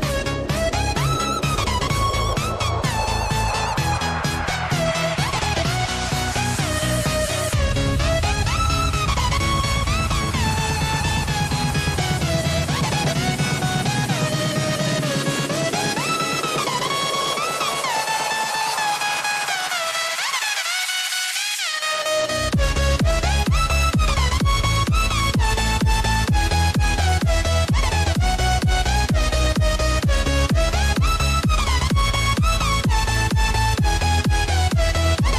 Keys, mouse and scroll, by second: 0.4-2.3 drag, 3.8 click, 4.4 click, 5.2 click, 7.1-8.3 drag, 8.7 Tab, 9.3 click, 10.5 click, 11.1 click, 12.1 shift+click, 12.6 shift+click, 13.4 shift+click, 14.6 ctrl+b, 16.4 Tab, 17.5 click, 18.7 g, 34.9 click.